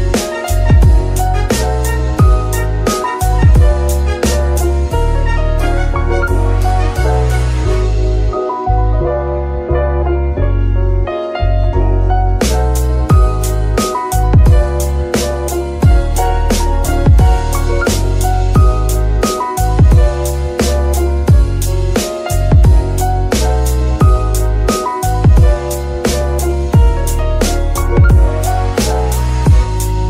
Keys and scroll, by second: 10.4 y, 12.9 Escape, 17.4 z, 20.2 r, 22.7 Escape, 24.1 r, 26.3 Escape.